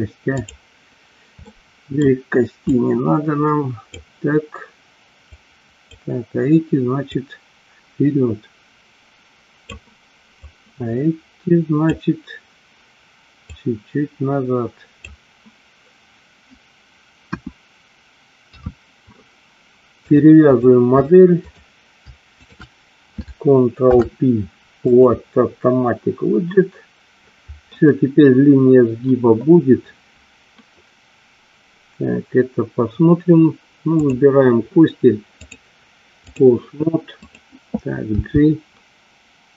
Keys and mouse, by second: 0.4 click, 1.6 middle click, 2.8-4.0 drag, 5.4 click, 7.1-9.6 drag, 10.5-12.2 drag, 13.7-15.2 drag, 17.4 KP_1, 18.7 KP_3, 20.3 click, 22.5 shift+click, 24.0 ctrl+p, 34.0 click, 35.4-36.5 drag, 37.4 click, 38.2 g.